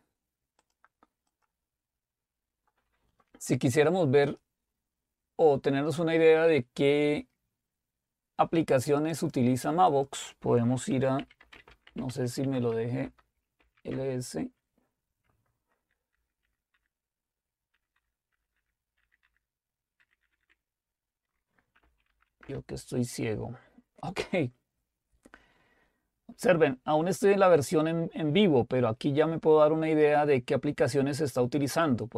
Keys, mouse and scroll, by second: 1.1 click, 3.7 click, 9.0-11.2 drag, 11.0-14.1 typing, 13.0 Return, 16.1 ctrl++, 16.4 ctrl++, 16.7 ctrl++, 17.7 ctrl++, 18.0-18.4 ctrl++, 18.6 ctrl++, 19.0 ctrl++, 19.2 ctrl++, 20.0 ctrl++, 20.2 ctrl++, 20.4 ctrl++, 21.6-22.6 typing.